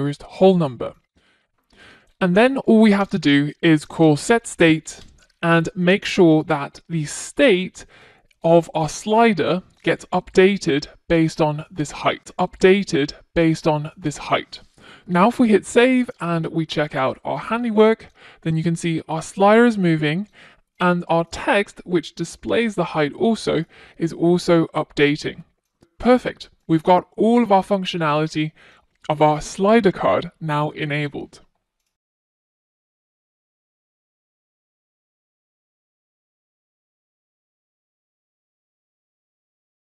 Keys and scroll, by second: 6.2 Return, 10.1 super+v, 14.7 super+s.